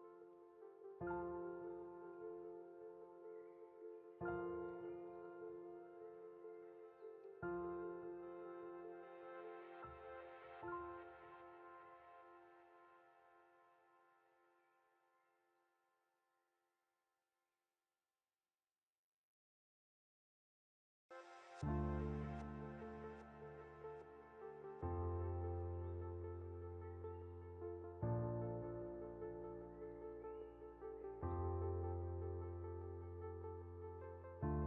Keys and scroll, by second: 2.2 ctrl+0, 4.9 Delete, 8.6 ctrl+c, 8.8 ctrl+f, 17.4 ctrl+c, 19.7 ctrl+f, 20.2 ctrl+z.